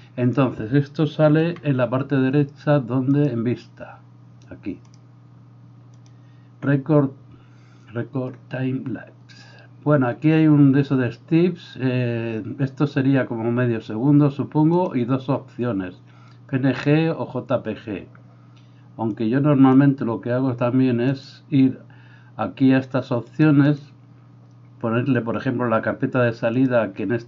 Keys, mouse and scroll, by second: 0.0-3.3 drag, 1.5 n, 3.3-4.9 middle drag, 4.9-21.3 drag, 21.3-23.4 middle drag, 23.4-27.2 drag.